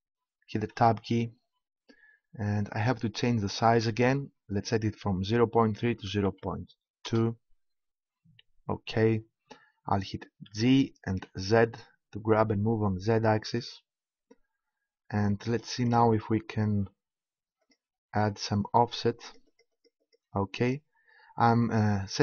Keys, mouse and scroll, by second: 0.7 Tab, 3.5-5.2 drag, 10.5 g, 13.6-15.3 drag.